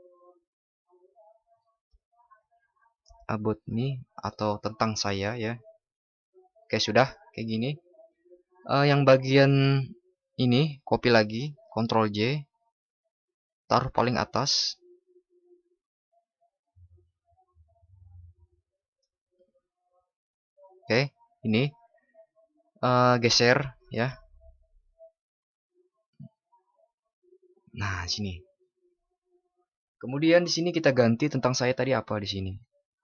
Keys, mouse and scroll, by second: 12.2 ctrl+shift+i.